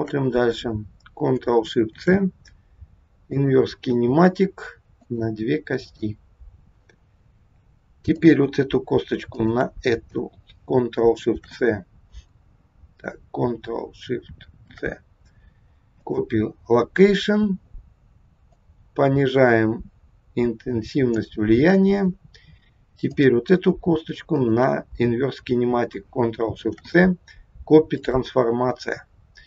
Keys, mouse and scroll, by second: 1.9 ctrl+shift+c, 5.0 click, 5.9 click, 8.1 click, 9.3 shift+click, 9.7 shift+click, 11.4 shift+c, 14.6 ctrl+shift+c, 18.6 click, 21.9-23.0 scroll up 5, 23.0 click, 24.4 shift+click, 26.5 ctrl+shift+c, 29.0 scroll down 3.